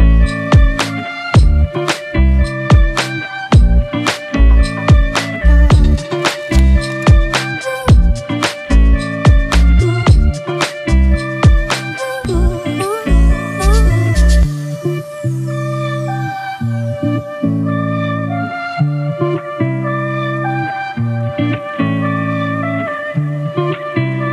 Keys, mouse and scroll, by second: 5.4-6.7 scroll down 1, 12.1 double click.